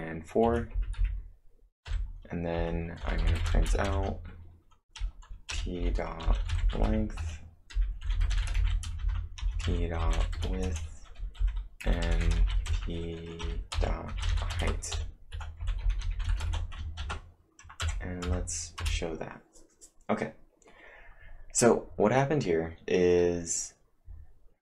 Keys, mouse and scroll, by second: 0.0-4.4 typing, 2.6 Return, 6.6-11.1 typing, 12.9-14.0 typing, 16.1-16.9 typing, 17.0 ctrl+`, 17.9 Up, 18.3 Up, 18.8 Return.